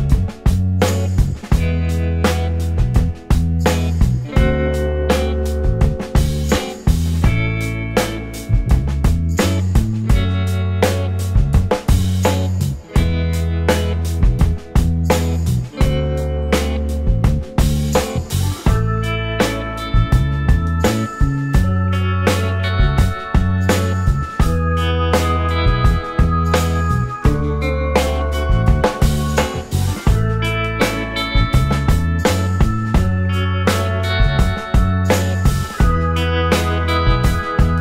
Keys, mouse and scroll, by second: 1.2 alt+middle click, 1.3 alt+click, 2.1-2.8 scroll up 1, 3.0 alt+middle click, 3.2-3.6 alt+scroll up 1, 3.6 alt+click, 4.0-4.3 scroll up 1, 4.3 middle click, 6.3 alt+click, 8.5 scroll, 8.5 alt+scroll down 1, 8.8 alt+click, 10.3 alt+scroll up 2, 10.9-12.0 scroll down 1, 12.2 alt+middle click, 13.4 shift+l, 14.6 typing, 17.7-18.4 typing, 20.7 space, 21.3 space, 21.7 scroll up 1, 22.6 alt+middle click, 22.8-23.2 alt+scroll up 3, 24.0 w, 34.3 alt+middle click, 35.2 scroll down 1, 35.6 alt+click.